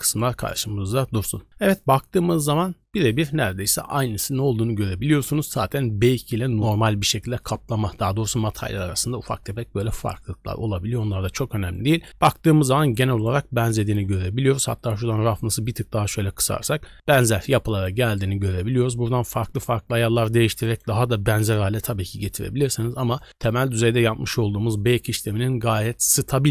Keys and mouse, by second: 0.1 middle click, 0.4 click, 11.7-12.0 drag, 12.2 shift+drag, 12.4 middle click, 13.8 click, 14.8 click, 17.1 middle click, 17.3 click, 17.8 click, 18.8 click, 21.9-22.6 drag, 23.1 drag.